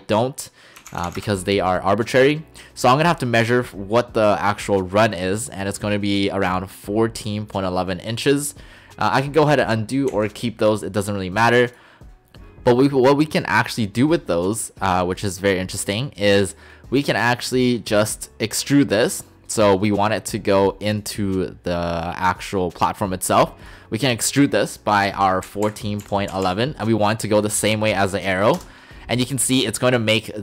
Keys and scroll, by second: 0.8 typing, 1.2 Return, 10.1 ctrl+z, 25.5-26.4 typing, 28.6 Return.